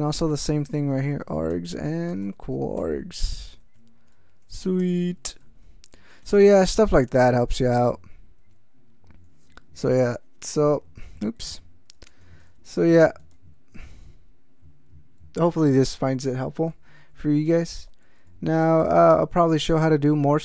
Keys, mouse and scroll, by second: 0.5-4.8 typing, 6.2 ctrl+k, 7.0 ctrl+x, 7.2 ctrl+s, 11.0 Caps_Lock, 12.1 ctrl+c, 12.2 ctrl+n, 12.4 ctrl+c, 12.5 ctrl+n, 13.2 ctrl+c, 13.3 ctrl+n, 13.7 ctrl+c, 13.9 ctrl+n, 16.5 ctrl+a, 16.7 ctrl+k, 17.5 ctrl+x, 17.6 ctrl+s, 18.8 ctrl+n, 19.3 ctrl+e.